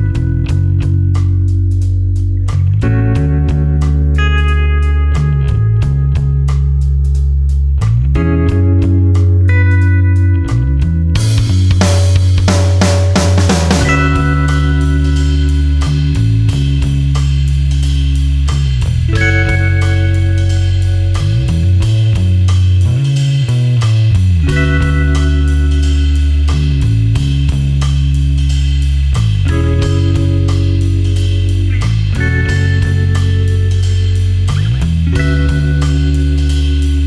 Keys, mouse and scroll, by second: 2.6 click, 3.1-3.8 scroll up 1, 3.8 scroll down 1, 4.0 scroll up 1, 5.8-7.9 scroll down 1, 8.9 click, 9.5-10.9 scroll up 1, 10.9-14.2 scroll down 1, 15.9 click, 16.5-17.4 scroll down 1, 18.0-19.3 scroll up 1, 20.1 click, 20.9-23.0 scroll up 1, 25.2-26.8 typing, 26.9 Tab, 29.5 click, 31.0 ctrl+click, 31.3 ctrl+space, 33.4 ctrl+alt+click, 35.9 ctrl+alt+click.